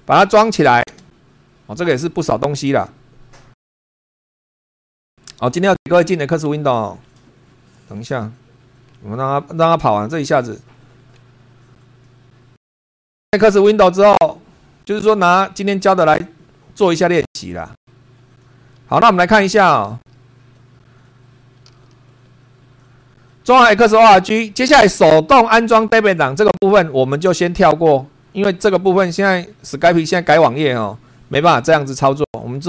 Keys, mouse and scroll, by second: 0.9 Return.